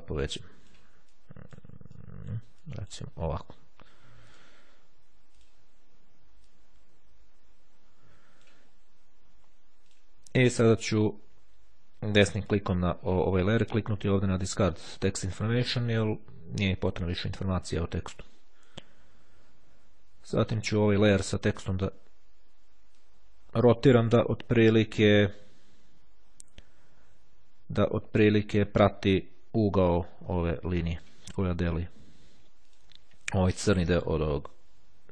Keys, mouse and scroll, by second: 2.0 click, 2.8 click, 3.5 click, 5.5 click, 6.6-8.9 drag, 10.0 click, 10.7 right click, 15.1 click, 19.0-19.5 ctrl+scroll up 2, 20.9 click, 23.0-31.6 drag, 32.8 click.